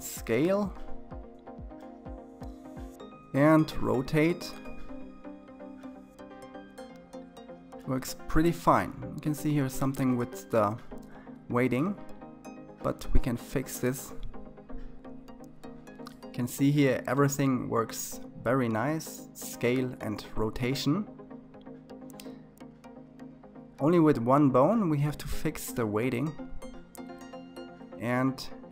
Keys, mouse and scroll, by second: 3.0 r, 14.0 click, 15.1 r, 16.4 click, 16.5 r, 17.4 middle click, 17.9 scroll down 2, 18.3 s, 19.3 KP_3, 19.7-20.3 scroll up 2, 20.3 click, 21.4 r.